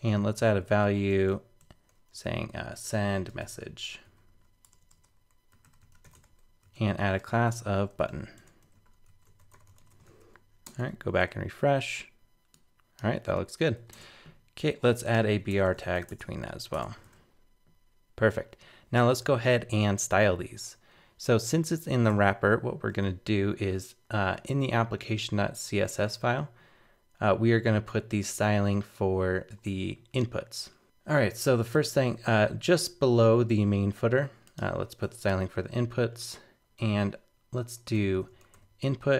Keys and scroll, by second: 10.1 super+s, 10.7 super+Tab, 11.2 super+r, 13.9 super+Tab, 16.5 super+s, 16.7 super+Tab, 17.0 super+r, 22.1 super+Tab.